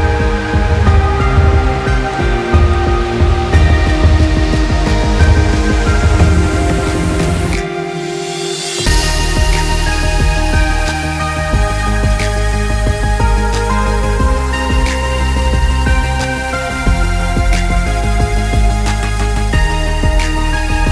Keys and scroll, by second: 16.4 ctrl+=, 17.0 ctrl+=, 17.3 ctrl+-, 17.4 ctrl+-, 17.7 ctrl+-, 19.1 ctrl+i, 20.6-20.9 typing.